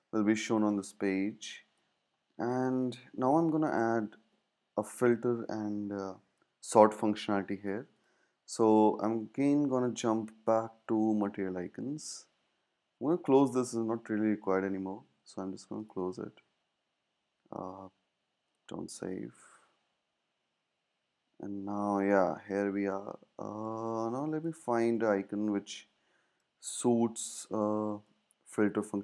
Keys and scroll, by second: 0.7 space, 10.9 super+`, 21.0 super+`.